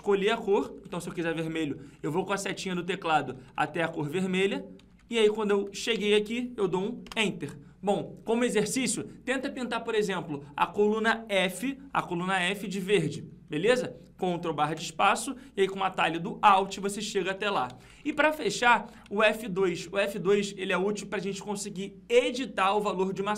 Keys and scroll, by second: 14.6 ctrl+space.